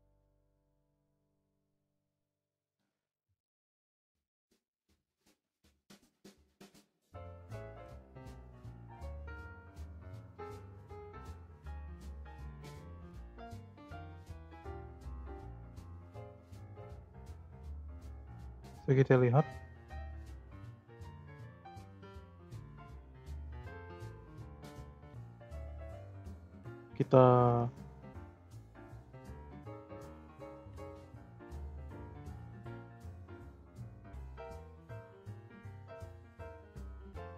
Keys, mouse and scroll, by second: 1.6-2.2 scroll down 2, 2.2-4.7 middle drag, 4.7-8.7 drag, 8.7-9.1 scroll down 2, 9.1-9.8 scroll up 5, 9.8 click, 11.0-15.6 drag, 16.9-17.3 scroll down 4, 18.6-21.6 drag, 23.1-24.7 drag, 24.7-25.4 scroll up 4, 25.4-26.5 shift+middle drag, 26.5-29.5 right drag, 29.6 click, 30.2 click, 30.7 middle click, 31.0-31.5 scroll up 6, 31.5-37.3 right drag.